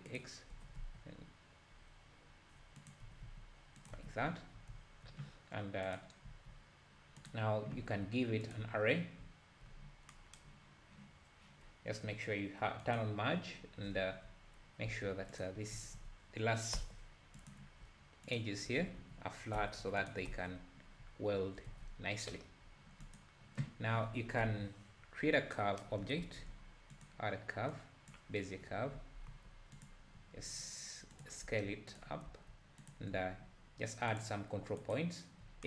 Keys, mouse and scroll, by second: 0.6 g, 3.1 s, 3.9 Tab, 8.6-9.2 drag, 12.8 click, 14.9 Tab, 15.4 alt+click, 15.7 s, 18.4 alt+click, 18.8 s, 20.3 Tab, 21.0 `, 21.7 alt+a, 21.8 `, 22.7-23.2 scroll down 2, 23.2-23.5 drag, 24.1 scroll down 1, 24.4 KP_7, 25.1 KP_7, 28.2 shift+a, 28.9 g, 30.2 s, 31.4 g, 32.2-32.9 scroll down 1, 32.2 g, 32.9 click, 34.9 ctrl+right click.